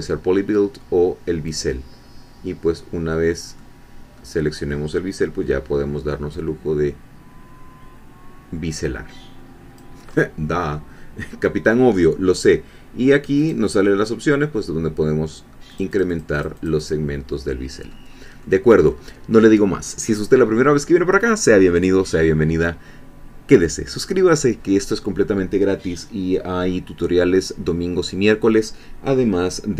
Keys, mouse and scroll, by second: 1.5 click, 3.6-5.6 middle drag, 6.3-10.1 drag, 10.1-10.9 scroll up 3, 10.9 scroll down 1, 11.4-12.4 scroll up 1, 13.4 click, 15.7-17.0 drag, 17.3 middle click, 18.1 scroll down 1, 18.4-20.8 middle drag.